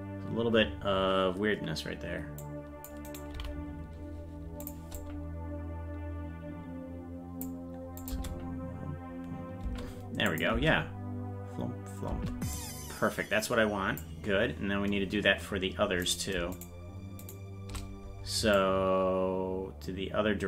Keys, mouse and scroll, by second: 2.4 click, 3.0 right click, 3.3 g, 4.9-7.4 drag, 8.0-9.8 drag, 8.1 space, 9.8 space, 10.3 click, 10.5 space, 12.5-14.0 drag, 16.6 shift+right click, 18.5-20.4 drag.